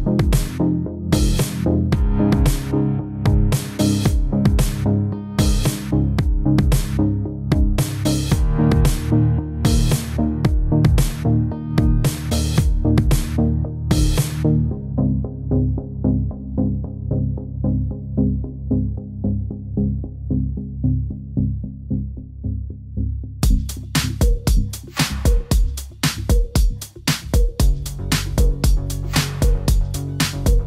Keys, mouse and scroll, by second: 0.0 scroll up 2, 0.2 shift+middle click, 0.2 middle click, 0.5 click, 0.6 middle click, 0.8 click, 0.9 middle click, 2.0 middle click, 2.3 shift+click, 2.4 g, 2.7-3.0 scroll down 4, 2.9 middle click, 3.5 click, 3.7 click, 4.1 click, 4.2 Tab, 4.3 click, 4.4 Tab, 4.5 scroll up 3, 4.8 click, 4.8 middle click, 5.0 Tab, 5.2 click, 5.4-7.5 typing, 5.5 click, 5.7 shift+middle click, 5.8 middle click, 6.1 shift+middle click, 6.2 click, 6.5 click, 6.5 click, 7.1 click, 7.4 click, 7.4 click, 7.9 click, 8.1 click, 8.5 click, 8.9 click, 9.2 click, 9.2 click, 9.4 click, 9.5 click, 9.7 middle click, 9.9 Tab, 10.3 click, 11.9 click, 12.2-12.9 scroll down 3, 12.9 middle click, 13.6 click, 13.9 click, 13.9 middle click, 14.6 shift+click, 15.0 Tab, 15.1 middle click, 15.4 click, 15.5-17.7 typing, 16.0 click, 16.3 click, 16.8 click, 17.0 click, 17.3 click, 17.5 middle click, 17.6 click, 17.6 middle click, 18.2 click, 18.3 click, 18.5 click, 18.7 click, 18.8 g, 19.2 r, 19.6 click, 19.8 click, 19.9 middle click, 20.3 click, 20.5 r, 21.9 click, 22.0 r, 22.5 click, 22.7 r, 23.1 click, 23.3 r, 23.9 Escape, 23.9 click, 24.1 r, 24.5 middle click, 25.0 click, 25.1 click, 25.4 click, 25.4 middle click, 26.0 Tab, 26.1-26.7 scroll down 2, 26.8 click, 27.2 click, 27.4 click, 27.6 Tab, 28.0 shift+middle click, 28.2 shift+middle click, 28.8 shift+middle click, 28.9 middle click, 29.1 ctrl+s, 29.2 middle click, 29.5 alt+h, 29.6 Tab, 29.8 alt+h, 30.2 Tab, 30.6 click.